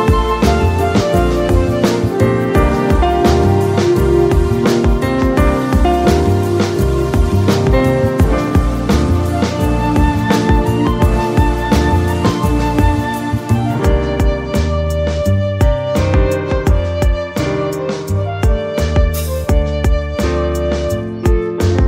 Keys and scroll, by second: 2.6 space, 5.6-7.5 typing, 8.6 space, 8.8 o, 9.2 space, 9.5 y, 10.8 ctrl+a.